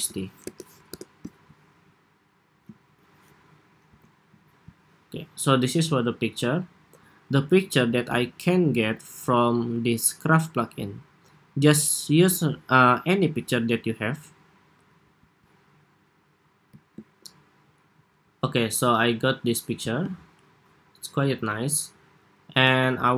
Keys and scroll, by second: 3.8 alt+Left.